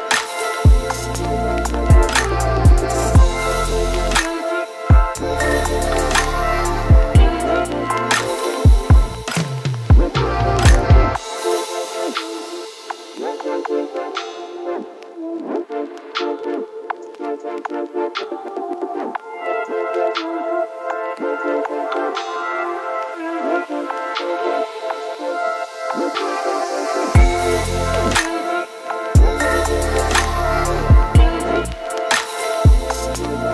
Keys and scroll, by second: 1.4-3.8 typing, 5.8 ctrl+t, 11.1 ctrl+t, 23.1 ctrl+t, 27.8 ctrl+t.